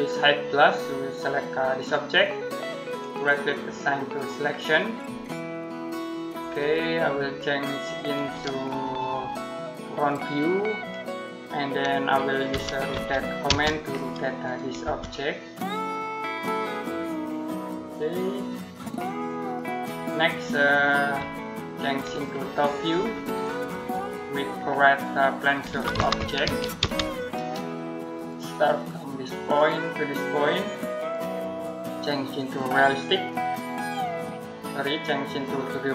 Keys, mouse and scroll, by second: 1.6 click, 2.8 right click, 3.9 click, 6.4 click, 11.2-11.5 scroll down 1, 11.5 middle click, 12.1-13.3 typing, 13.6 click, 14.7 space, 16.3 click, 19.2 click, 19.9 middle click, 20.1-21.9 scroll down 1, 21.9 click, 24.1-24.9 scroll down 1, 24.9 middle click, 25.3-27.1 typing, 28.0 click.